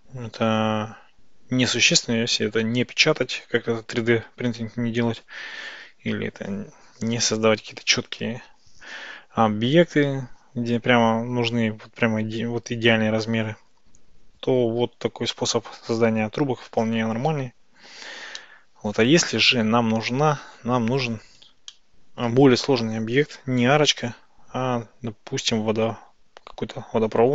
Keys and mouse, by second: 18.5-19.2 middle drag, 21.8-22.3 shift+middle drag.